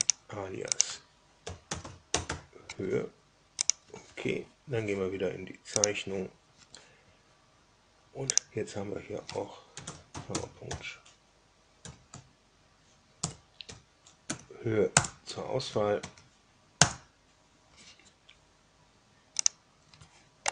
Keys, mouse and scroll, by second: 0.0 drag, 0.7 click, 1.1-2.7 typing, 3.6 click, 5.8 click, 8.2 click, 9.4-11.8 typing, 13.2 BackSpace, 13.6 o, 14.2 Down, 14.8 Return, 15.7 Tab, 15.9 Tab, 16.8 Return, 19.3 click, 20.4 middle click.